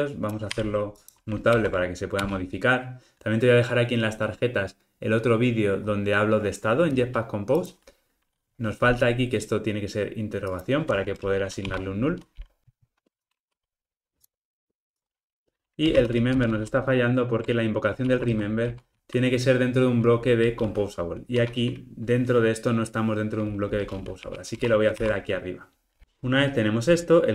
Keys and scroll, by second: 1.6 alt+Return, 12.8 ctrl+alt+o, 12.9 alt+super+l, 13.3 alt+Return, 18.0 super+x, 25.0 super+v.